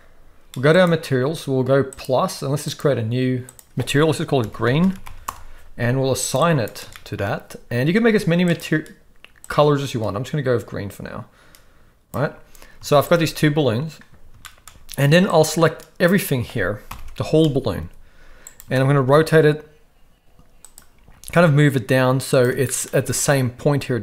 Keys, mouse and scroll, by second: 2.0-3.0 drag, 3.5-5.3 drag, 5.0 e, 6.4 click, 6.9 shift+middle click, 8.4 click, 12.8 z, 14.4 shift+middle click, 15.4-16.1 drag, 16.9 ctrl+l, 17.8 g, 18.8 shift+middle click, 19.1 r, 21.1 g.